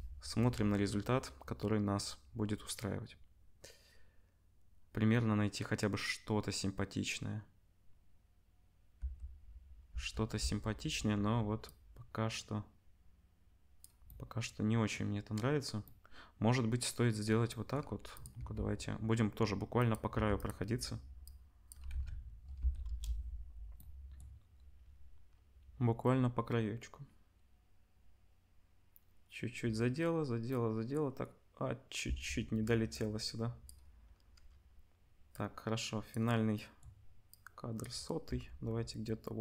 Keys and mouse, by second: 9.0 space, 9.9 space, 18.2-21.2 middle drag, 18.3 g, 20.1 g, 21.2 click, 21.9 ctrl+s, 23.5 space, 23.6 KP_0, 23.8 click, 32.1 space, 38.2 g.